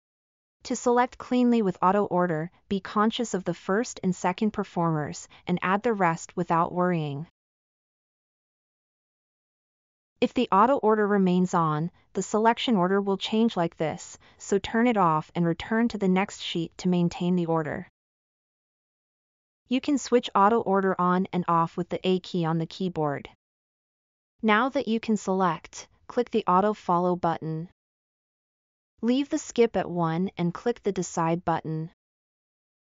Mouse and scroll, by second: 8.7 click, 13.5 click, 30.1-30.8 middle drag, 31.5 scroll.